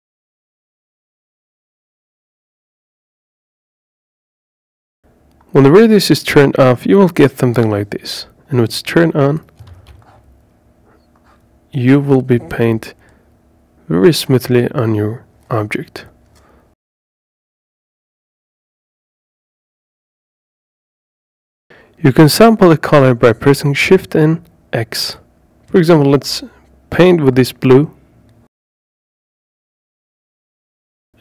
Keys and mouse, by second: 0.2 ctrl+z, 1.3 ctrl+z, 15.1 click, 17.5-19.5 right drag, 26.9 shift+x, 27.4 shift+x, 27.5 shift+x, 27.6 shift+x.